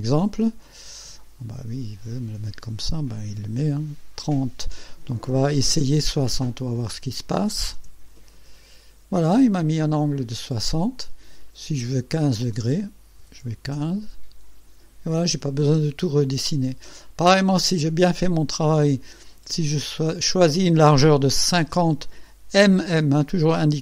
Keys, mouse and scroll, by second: 1.2-2.4 right drag, 6.2 click, 6.8 KP_6, 7.0 KP_0, 7.8 KP_Enter, 9.6-11.6 drag, 12.6 click, 13.3 KP_1, 13.5 KP_5, 13.8 KP_Enter, 15.5-17.1 drag, 19.8 click, 21.5 KP_5, 21.7 KP_0, 22.8 m.